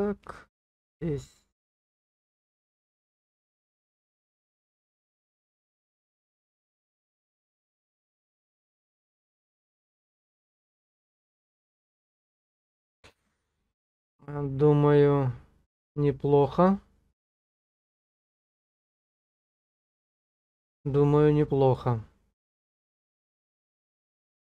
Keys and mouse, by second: 2.2 click, 4.6-7.7 drag, 9.2 click, 11.7 click, 12.7 click, 18.3 middle click.